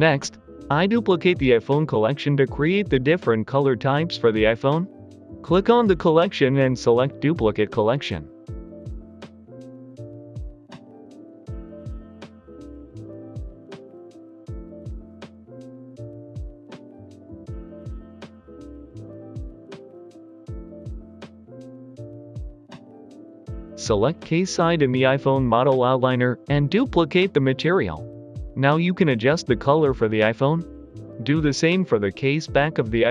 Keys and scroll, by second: 6.4-7.9 typing, 13.4-15.4 typing, 14.9 Return, 27.4 ctrl+BackSpace, 27.5 ctrl+BackSpace, 27.8-29.0 typing, 29.2 Return, 31.9 Escape, 32.9 ctrl+BackSpace.